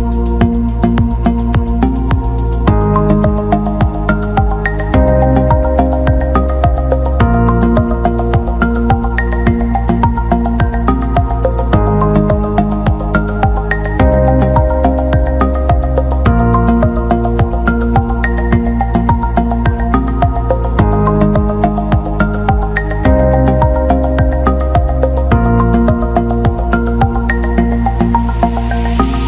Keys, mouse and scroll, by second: 2.1 click, 3.0-4.3 drag, 6.3-7.6 drag, 9.5 alt+shift+middle click, 18.3-20.9 drag, 20.9 alt+shift+middle click, 21.3-21.6 alt+middle drag, 22.6 alt+middle click, 22.9 ctrl+alt+middle click, 23.2 alt+shift+middle click, 24.0 Tab, 27.5 click, 28.3 click.